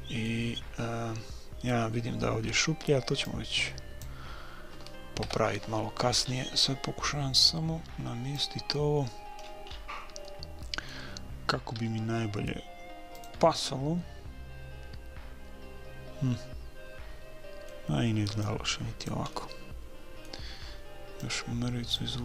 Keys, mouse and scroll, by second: 3.3-5.0 drag, 5.2 KP_3, 6.3-7.5 middle drag, 7.5-9.3 drag, 9.5-12.1 middle drag, 11.8 r, 13.5-15.5 middle drag, 18.4 click, 19.4 middle click, 19.6 click, 19.6 right click, 20.2 middle click, 21.2-22.2 drag.